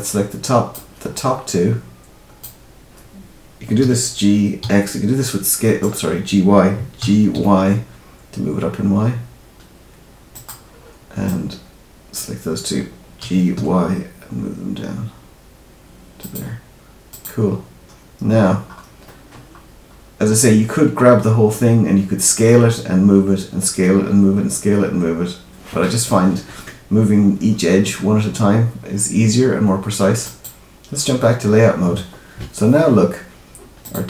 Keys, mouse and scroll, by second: 30.2 click, 33.7 click.